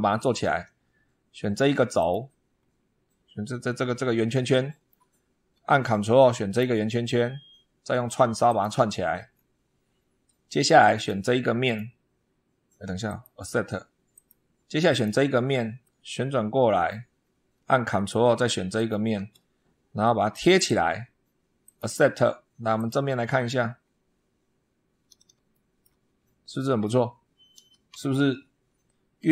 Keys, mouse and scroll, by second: 0.0 shift+click, 0.1 shift+middle click, 0.6 shift+scroll up 1, 1.8 click, 2.4 scroll down 1, 4.4-4.9 shift+middle drag, 5.0 shift+scroll up 1, 6.4 ctrl+click, 8.3 click, 9.2-9.7 scroll down 2, 10.8 click, 11.5 click, 12.9 click, 14.0 click, 14.8 click, 15.7 middle click, 15.8 click, 16.4 middle click, 17.1 scroll down 1, 18.6 ctrl+click, 20.2 click, 21.5 click, 22.6 click, 23.4-24.1 scroll up 4, 25.4-25.8 shift+middle drag.